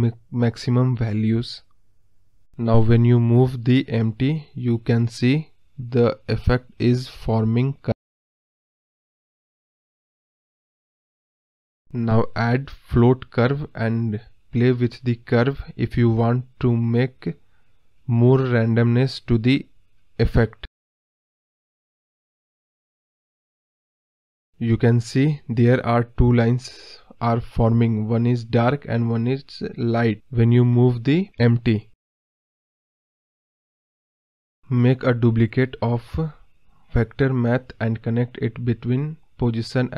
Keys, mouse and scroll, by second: 0.1-0.6 scroll up 8, 0.6 scroll down 5, 1.0-2.0 middle drag, 2.0 scroll down 1, 2.2-3.2 middle drag, 3.2 g, 11.3 ctrl+z, 17.7-22.0 drag, 25.2 g, 28.8 ctrl+z, 36.1 ctrl+j.